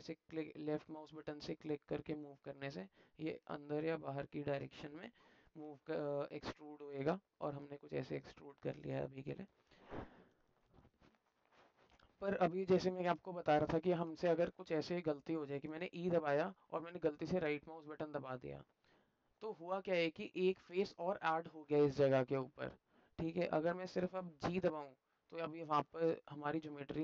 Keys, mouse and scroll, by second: 4.7 alt+middle click, 6.1-7.4 alt+middle drag, 7.7 alt+middle click, 12.3 alt+middle click, 12.8 shift+middle click, 13.7 alt+click, 14.3 middle click, 18.4-19.4 alt+drag, 20.1 alt+click.